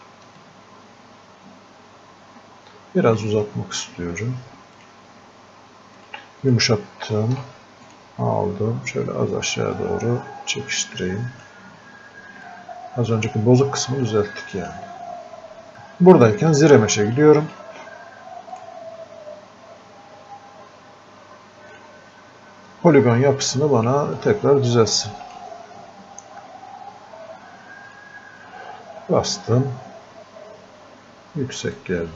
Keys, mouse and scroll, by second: 0.5-12.5 ctrl+drag, 12.5-14.6 drag, 16.6-18.6 drag, 21.8 click, 24.2-27.6 drag, 27.9 click, 31.8-32.1 drag.